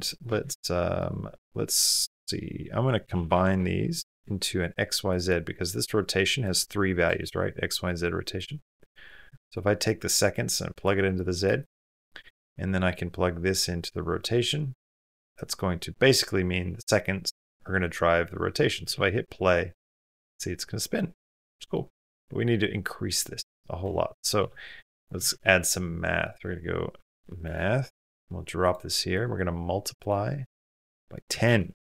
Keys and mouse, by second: 0.2 shift+a, 4.5-8.0 drag, 8.6 click, 9.8 click, 11.1 click, 14.7-15.2 drag, 18.7 space, 21.5 middle click, 22.0 click, 23.1 click, 24.0 middle click, 24.5 space, 24.6 click, 25.0 shift+click, 25.1 shift+a, 29.1 click, 30.4 click.